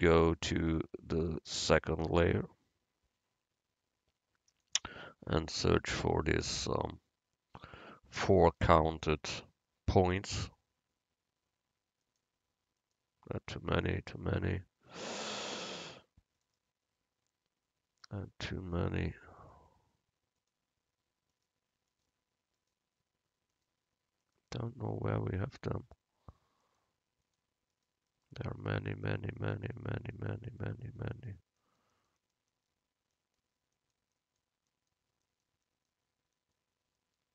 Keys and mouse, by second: 4.7-6.5 drag, 7.6 z, 16.7-18.5 right drag, 18.5 middle click, 19.6-26.0 right drag, 26.8-30.0 right drag, 35.9-37.3 right drag.